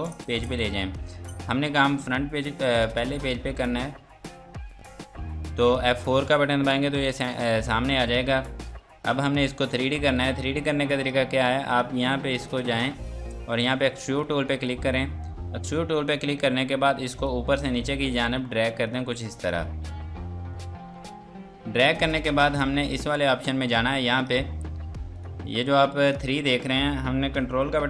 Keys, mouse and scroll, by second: 0.8-1.5 typing, 3.2 click, 6.1 F4, 7.2 click, 7.7-9.7 scroll down 1, 10.1 click, 17.2 click, 22.8 click.